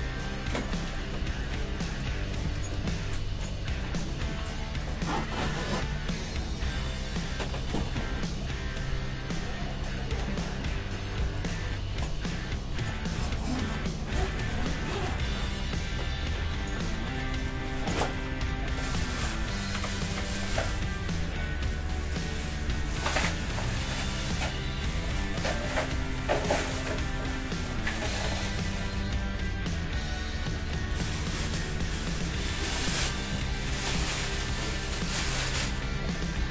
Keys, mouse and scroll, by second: 0.5-3.3 right drag, 0.7-3.6 middle drag, 2.4 g, 6.1-8.2 middle drag, 6.6 a, 6.8 Tab, 7.8 Tab, 8.2-9.8 right drag, 8.9 g, 9.8-11.2 middle drag, 11.2-12.8 right drag, 11.6 g, 12.8 middle click, 13.2 Tab, 14.2 middle click, 14.2 KP_1, 16.0 Tab, 17.1-20.6 right drag, 17.4 g, 19.0 g, 20.9-25.2 right drag, 21.5 g, 23.7-28.7 middle drag, 24.3 g, 25.5 g, 28.3 right click, 28.9-32.5 middle drag, 29.0 g, 29.0-30.3 drag, 30.8 g, 32.5 Tab, 32.7-34.6 right drag, 33.0 g, 36.2-36.5 middle drag.